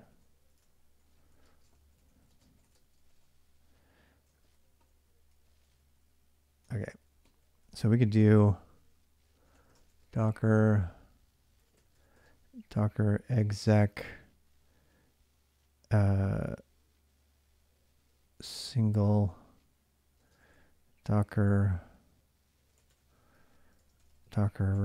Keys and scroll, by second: 0.0-12.4 typing, 14.4 typing, 17.9-20.8 typing, 22.2-24.8 typing.